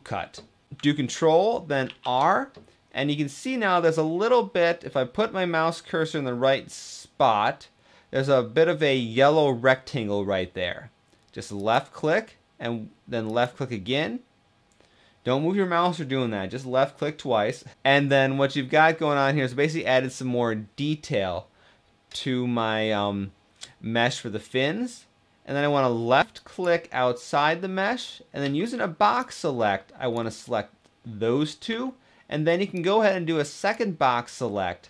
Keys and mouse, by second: 1.5 ctrl+r, 13.0 click, 26.1 click, 28.1 b, 31.4 b.